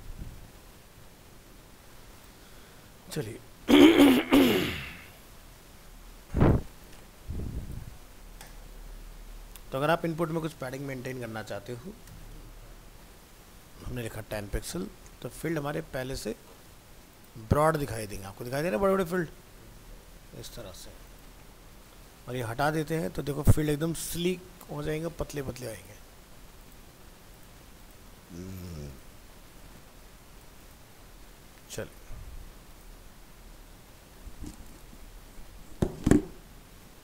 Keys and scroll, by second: 0.0 alt+Tab, 4.4 ctrl+w, 14.1 ctrl+s, 14.7 alt+Tab, 21.6 alt+Tab, 24.4 ctrl+s, 24.8 alt+Tab, 28.2 alt+Tab, 31.0 ctrl+s, 31.3 ctrl+w, 32.0 ctrl+s.